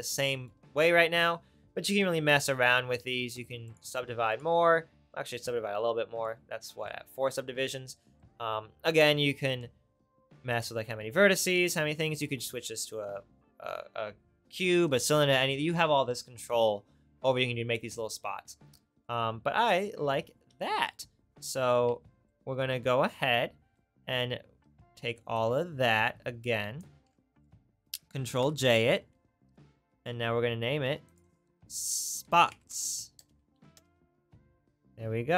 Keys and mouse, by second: 5.8 middle click, 28.4 ctrl+j.